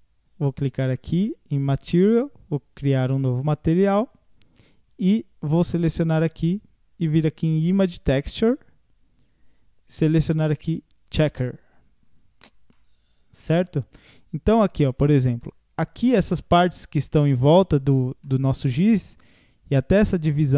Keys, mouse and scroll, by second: 0.6 click, 2.8 click, 5.7-8.7 drag, 10.0-12.2 drag, 12.4 scroll up 4, 12.7-15.0 middle drag, 15.0 scroll down 1, 15.4-18.4 middle drag, 19.3 scroll up 1.